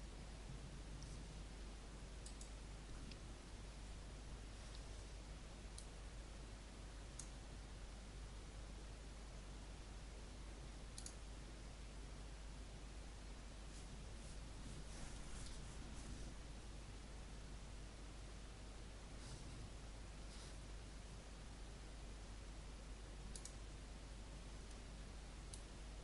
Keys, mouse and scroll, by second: 0.1-2.2 scroll up 1, 2.3 right click, 5.2 right click, 5.7-26.0 drag.